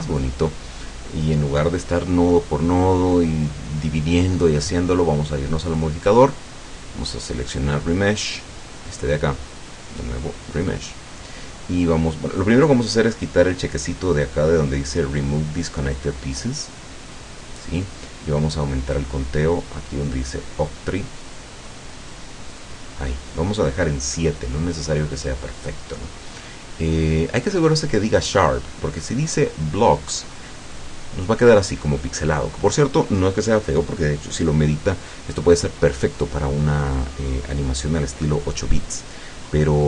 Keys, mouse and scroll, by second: 5.7 click, 10.7 click, 16.8 click, 21.3 click, 21.7 click, 22.5 click, 29.1 click, 30.7 click.